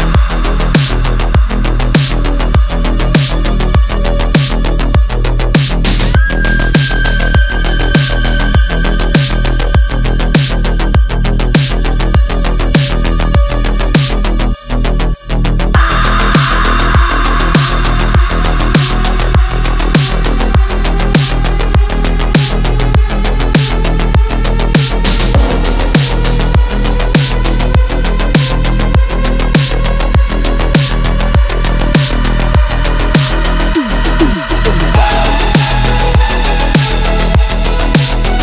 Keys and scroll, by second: 0.8 Insert, 1.0 x, 1.5 w, 2.7 q, 4.3 q, 9.3 w, 10.6 q, 13.9 q, 19.9 ctrl+g, 20.1 w, 20.5 -, 24.7-27.3 typing, 28.3 ctrl+c, 28.6 space, 31.4 ctrl+d, 32.3 ctrl+h, 33.1-34.5 typing, 35.0 Left, 35.1 Return, 35.5 ctrl+a, 36.5 KP_3, 36.9 KP_1, 37.0 KP_3, 37.1 KP_1.